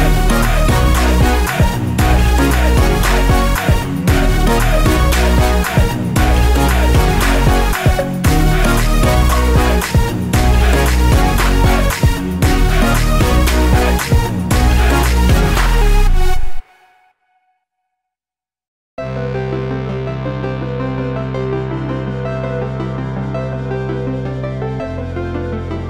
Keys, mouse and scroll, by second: 4.7-8.3 drag, 9.2-18.8 middle drag, 18.8 click, 19.8 click, 20.0-20.8 scroll down 1, 20.8 click, 21.2-22.8 middle drag, 22.8 click, 23.3 shift+middle click, 24.1 click.